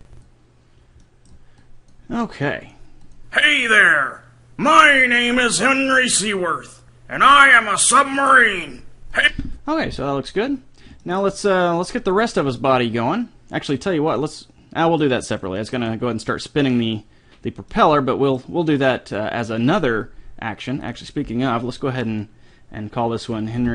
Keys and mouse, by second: 1.0 middle click, 1.6-3.4 drag, 9.2-13.2 drag, 11.0 middle click, 11.0 right click, 12.2-13.4 right drag, 13.5 right click, 14.4-15.6 middle drag, 20.8-22.7 drag.